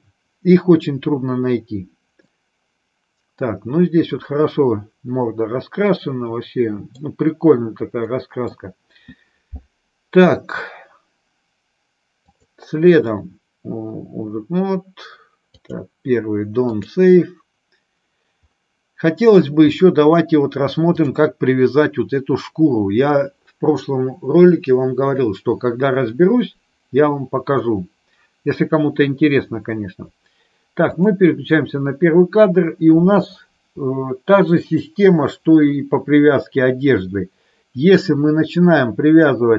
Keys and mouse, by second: 2.1-7.0 middle drag, 8.1 middle click, 12.2-17.2 drag, 20.9 click, 30.9 click.